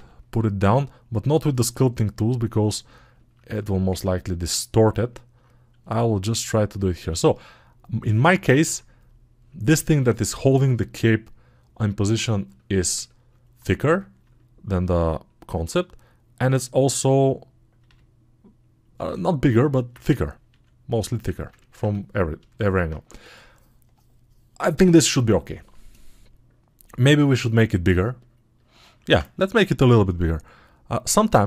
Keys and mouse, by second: 2.3-31.4 alt+middle drag.